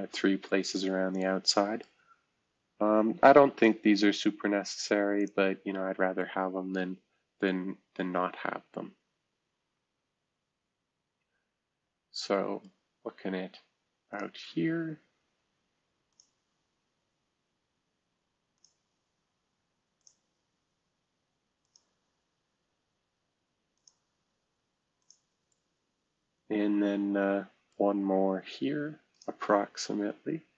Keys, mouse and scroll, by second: 5.2-5.8 drag, 5.8-7.4 scroll down 1, 7.4 right click, 7.5 middle click, 8.1-12.7 right drag, 14.1 click, 16.1 click, 18.6 click, 20.0 click, 21.6 click, 23.8 click, 25.0 click, 25.5-27.7 middle drag, 29.1 click.